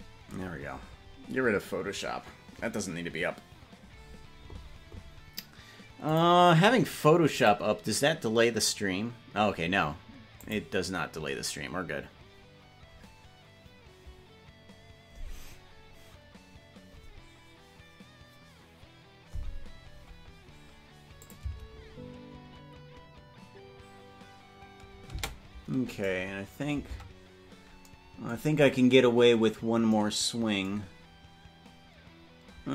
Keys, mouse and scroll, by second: 21.3 click, 21.5 space, 25.4 space, 26.2 right click, 27.2 ctrl+Tab, 29.2-29.6 scroll down 3.